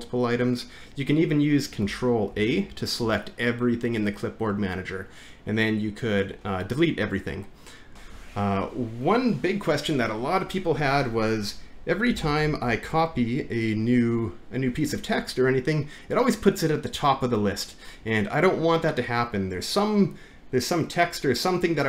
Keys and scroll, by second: 2.3 ctrl+a, 12.2 alt+`.